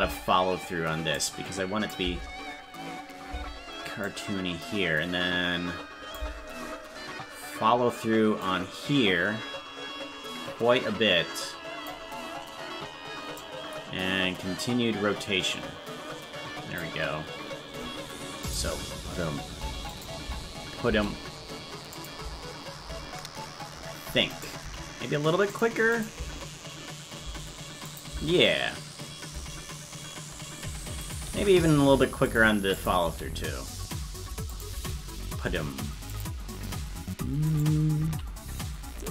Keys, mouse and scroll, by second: 1.1 click, 2.0 space, 4.0-6.1 drag, 8.4-11.9 drag, 13.3-16.8 drag, 18.4 click, 18.5 space, 19.9 click, 20.2 space, 21.9 click, 22.2 space, 24.3 right click, 24.3 space, 24.6 g, 25.9 click, 26.1 space, 27.9 click, 28.1 space, 31.0 right click, 31.0 space, 31.2 g, 32.7 click, 33.0 space, 34.5 click, 34.7 space, 36.1 click, 37.4 right click, 38.1 g.